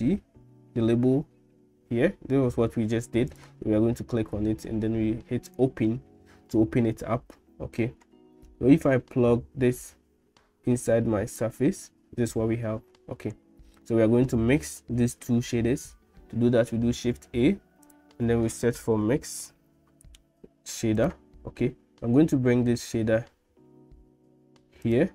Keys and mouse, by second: 9.9-11.5 drag, 13.9 middle click, 17.0 shift+a.